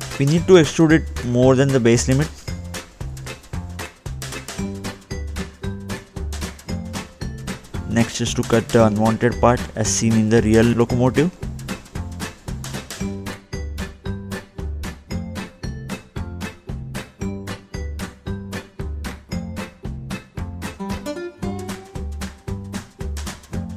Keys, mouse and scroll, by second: 0.4-0.8 scroll up 2, 0.9 middle click, 2.5-2.9 scroll up 2, 4.2 click, 6.3-6.8 scroll up 1, 6.8-7.4 scroll down 2, 7.5 middle click, 8.3 click, 9.7 ctrl+8, 11.1-11.9 scroll down 1, 11.9 scroll down 1, 13.0 scroll up 1, 13.6-14.3 scroll down 1.